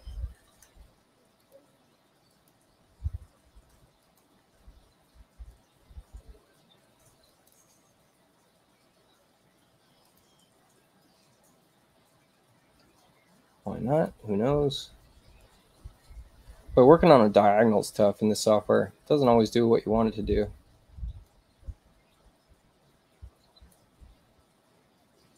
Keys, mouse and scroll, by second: 0.4 u, 1.4 click, 2.3 click, 4.0 ctrl+click, 5.5-7.4 drag, 7.3 right click, 9.2 u, 10.0 click, 12.3 space, 13.9 click, 15.4-17.1 drag, 19.1 click, 21.3-23.7 drag.